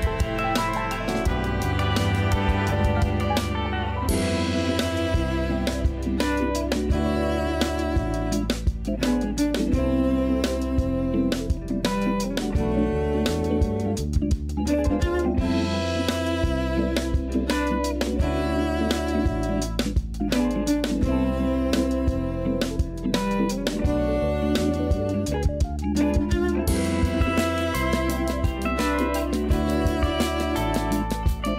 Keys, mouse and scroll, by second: 0.8 s, 3.5-4.5 scroll up 5, 4.5 g, 7.5 scroll down 1, 7.7-9.0 typing, 10.5 scroll down 1, 10.8-12.3 typing, 11.8 Tab, 12.8-13.6 scroll up 1, 13.6-15.3 shift+middle drag, 15.3-16.8 scroll down 1, 16.8-17.8 scroll down 1, 17.8-18.5 shift+middle drag, 18.5-19.7 scroll up 1, 19.7 click, 20.4 shift+d, 21.2 g, 22.8-25.9 scroll up 1, 27.1 KP_2, 28.0 KP_3, 28.8-29.1 scroll down 2, 29.1 r, 31.1 KP_1.